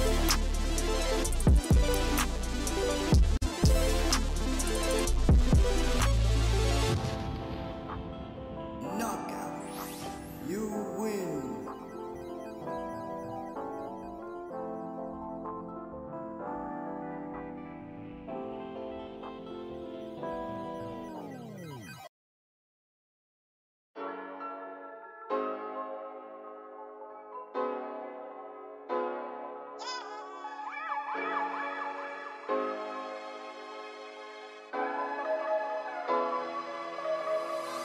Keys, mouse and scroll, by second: 0.9 ctrl+z, 2.0 scroll down 2, 2.7 g, 4.2 r, 9.3 g, 12.0 s, 14.3-15.0 scroll up 1, 19.9-22.8 scroll down 1, 23.4 scroll up 3, 26.7 shift+right click, 27.3 shift+a, 30.3 g, 31.9 g, 35.0-37.8 drag.